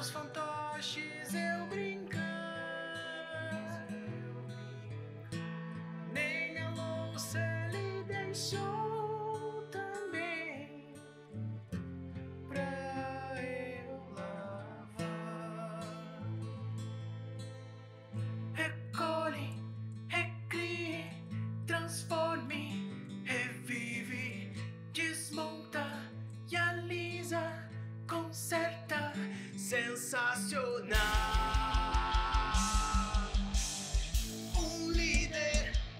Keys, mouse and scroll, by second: 0.2 click, 0.5 g, 3.2-4.2 scroll down 10, 3.5 click, 4.2 click, 4.5 middle click, 4.7 g, 5.3 r, 5.8 click, 6.0 shift+middle click, 6.1 g, 6.5 middle click, 6.6 g, 7.0 click, 7.2 alt+r, 7.5 click, 7.7 middle click, 7.9 g, 8.2 middle click, 9.0-9.4 scroll up 2, 9.2 middle click, 9.4 click, 9.7 alt+s, 9.8 click, 10.2 alt+s, 10.6 click, 11.1 alt+r, 11.8 click, 11.8 middle click, 12.1 click, 12.5 alt+r, 12.7 click, 12.9 middle click, 13.2 r, 13.5 middle click, 14.4-17.9 typing, 14.8 middle click, 15.2 middle click, 15.6 middle click, 16.2 middle click, 16.8 middle click, 17.3 middle click, 18.2 middle click, 18.3 scroll down 4, 18.4 middle click, 18.9 click, 19.0 middle click, 19.3 click, 19.4 middle click, 19.6 r, 19.9 click, 20.1 r, 20.3 middle click, 20.7 click, 20.8 middle click, 21.0 r, 21.4 click, 21.6 r, 21.9 middle click, 22.2 click, 22.3 middle click, 22.6 r, 22.8 middle click, 23.1 click, 23.2 middle click, 23.5 click, 23.6 middle click, 23.8 r, 24.2 r, 24.7 middle click, 25.0 click, 25.3 r, 25.8 click, 26.0 r, 26.4 middle click, 26.7 click, 27.1 click, 27.2 r, 27.8 middle click, 28.4 middle click, 29.1 click, 29.3 middle click, 29.5 r, 30.0 middle click, 30.3 middle click, 30.6 click, 30.7 middle click, 31.0 click, 31.2 r, 31.7 scroll down 3, 31.7 middle click, 32.0 middle click, 32.3 scroll down 1, 32.4 scroll up 5, 32.7 click, 32.9 middle click, 33.0 r, 33.3 middle click, 33.6 r, 34.0 middle click, 34.1 scroll down 4, 34.2 middle click, 34.5 click, 34.7 middle click, 35.0 middle click, 35.2 r, 35.9 click.